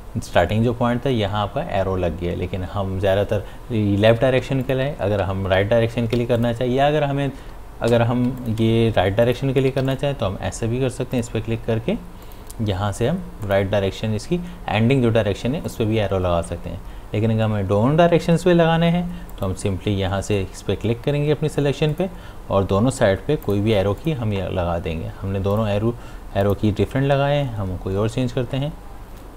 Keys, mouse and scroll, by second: 4.6 click, 5.2 p, 6.4 click, 7.9 p, 8.4 click, 9.7 v, 9.9 click, 15.7 click, 19.3 click, 21.9 click, 27.0-28.5 scroll down 1.